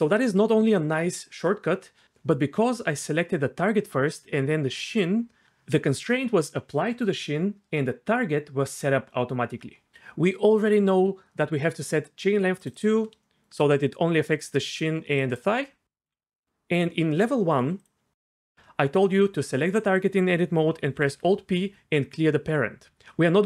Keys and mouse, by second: 12.7 click, 13.2 shift+middle click, 14.6-16.2 d, 14.6 click, 15.6 click, 16.4 Tab, 16.4 d, 17.8 click, 20.9 alt+p.